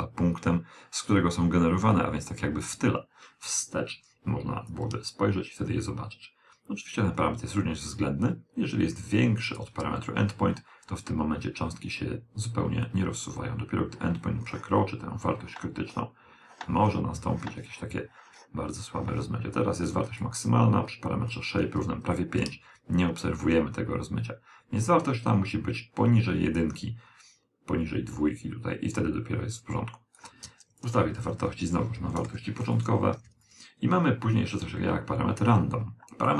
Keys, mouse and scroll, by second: 2.0 click, 10.2 click, 19.5 click, 28.2 click, 34.4 click.